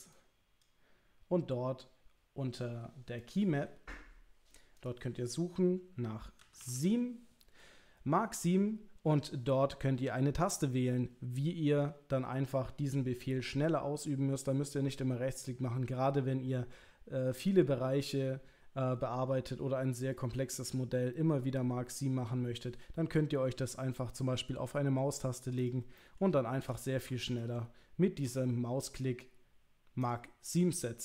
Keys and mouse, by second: 25.6 click, 26.0 middle click, 27.3 ctrl+click, 30.5 middle click.